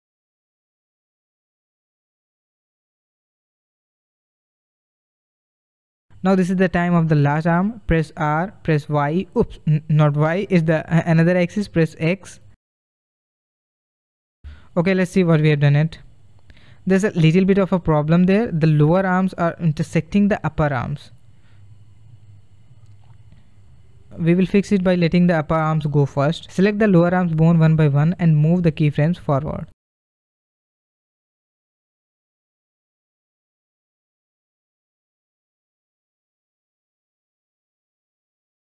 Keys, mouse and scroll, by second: 0.7-3.9 drag, 4.1-7.8 drag, 7.8 r, 13.6-15.7 drag, 15.7 space, 17.3 space, 18.6-21.6 drag, 27.9 click, 30.5 click, 31.6 shift+click, 34.1 click.